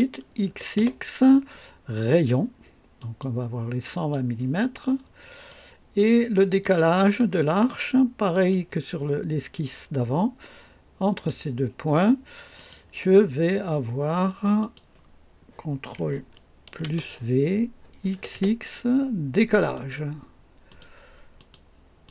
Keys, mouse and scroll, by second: 0.5 x, 1.9 click, 3.0 click, 3.9 click, 5.5-6.2 drag, 6.6-7.4 drag, 8.3 click, 11.0 click, 12.5 click, 14.6 click, 16.8 ctrl+v, 18.1 x, 19.7 click, 20.7 click, 21.4 click, 22.0 click.